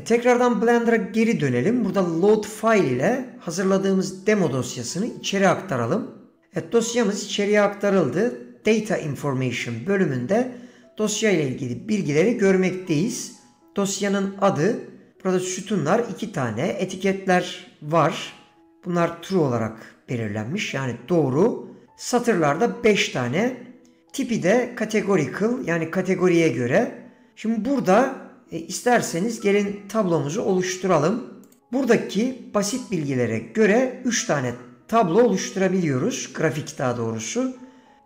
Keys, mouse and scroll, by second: 31.7-38.0 drag.